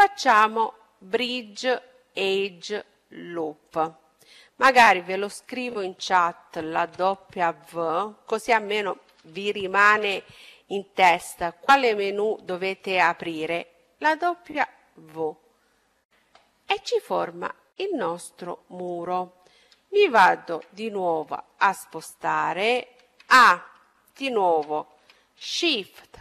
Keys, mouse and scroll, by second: 16.7 middle click, 18.3-19.6 middle drag, 19.8-23.1 middle drag, 22.8 a.